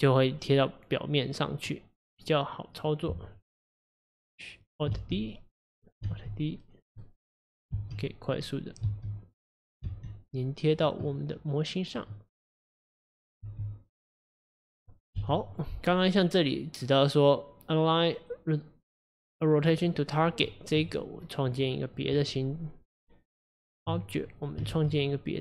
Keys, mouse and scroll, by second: 0.4-4.8 middle drag, 5.0 alt+d, 6.1 alt+d, 7.1 middle click, 7.8 alt+d, 8.5-8.9 middle drag, 8.9 alt+d, 9.9 alt+d, 11.1-12.6 middle drag, 12.6 click, 13.5 g, 14.3 middle click, 14.6-15.3 scroll down 2, 15.3 KP_1, 16.0-16.6 scroll up 1, 16.6-19.6 drag, 20.6-20.9 middle drag, 20.9 click, 21.3-21.7 scroll down 1, 21.7 middle click, 22.2 Tab, 24.4 click, 24.8 shift+a.